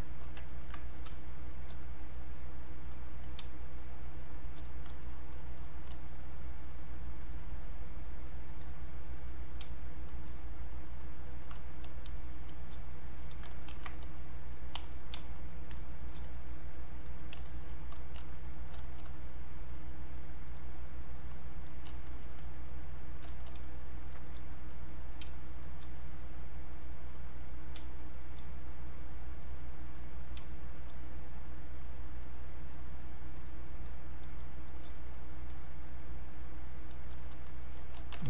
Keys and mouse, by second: 0.5 ctrl+right click, 0.7 ctrl+click, 1.1 space, 1.5 click, 1.6 space, 2.1 click, 3.4 space, 3.8 click, 3.9 space, 4.6 click, 5.0-9.6 shift+drag, 9.6 space, 10.0 click, 10.1 space, 10.6 click, 12.2 space, 12.4 click, 12.7 space, 13.7 ctrl+shift+1, 14.0 shift+click, 15.2 space, 15.5 click, 15.6 space, 16.2 click, 19.3 click, 23.6 space, 24.7 click, 25.2 space, 25.6 click, 25.8 space, 26.1 click, 27.8 space, 28.1 click, 28.3 space, 28.6 click, 30.4 space, 30.7 click, 34.4 space, 34.7 click, 37.5 click.